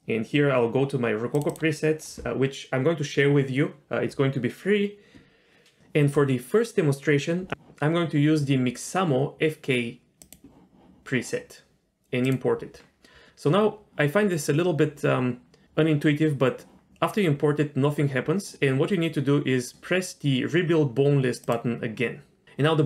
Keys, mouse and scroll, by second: 21.5-22.4 drag.